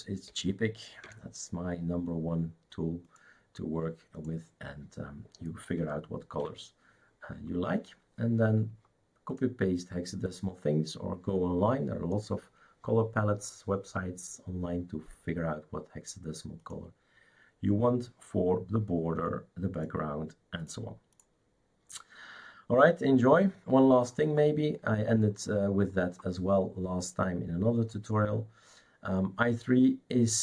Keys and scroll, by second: 0.0-0.3 typing, 1.0 Return, 6.3 shift+super+q.